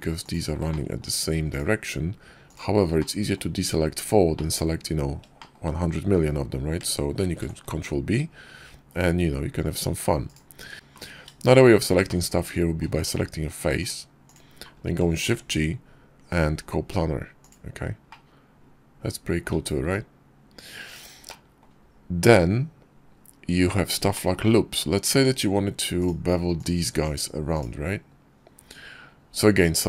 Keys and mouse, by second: 0.1 shift+click, 0.5 middle click, 0.9 shift+click, 2.8 middle click, 4.2 middle click, 5.2 shift+click, 7.0 ctrl+b, 11.4 shift+click, 11.9 click, 12.8 middle click, 13.7 click, 14.1 click, 14.5 middle click, 15.1 shift+g, 17.9 click, 18.7 middle click, 19.6 s, 21.1 middle click, 24.0 shift+click, 24.9 Tab, 29.6 click.